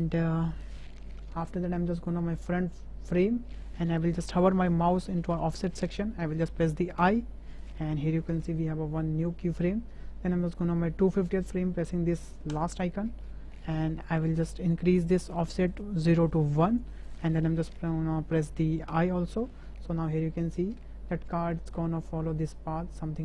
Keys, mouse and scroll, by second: 7.2 i, 12.7 click, 15.9 click, 16.2 click, 18.9 i, 20.4 click, 21.3 space.